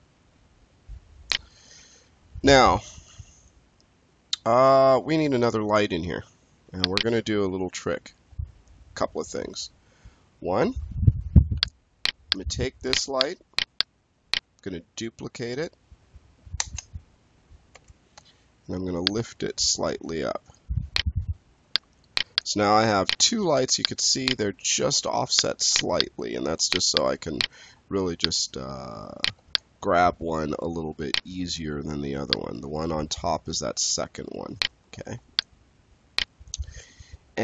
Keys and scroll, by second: 7.3 space, 9.2 space, 16.5 ctrl+d, 17.6 w.